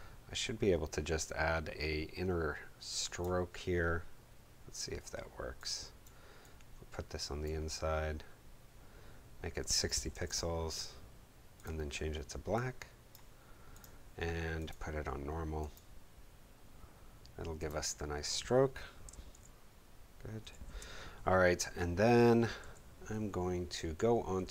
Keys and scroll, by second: 9.8-10.6 typing, 19.3 super+;.